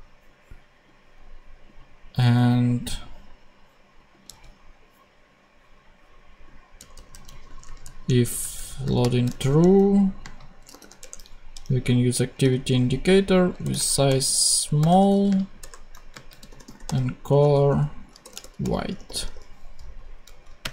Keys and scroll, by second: 0.5 super+x, 4.2 super+c, 6.7 Tab, 8.8 shift+Tab, 8.9 shift+,, 9.5 shift+super+,, 9.5 shift+super+v, 10.1 super+space, 10.5 s, 10.9 Return, 11.5 super+Return, 11.6 super+z, 12.3 super+e, 13.5-19.5 typing, 15.9 Right, 19.7 super+e, 20.2 super+Right, 20.5 super+space.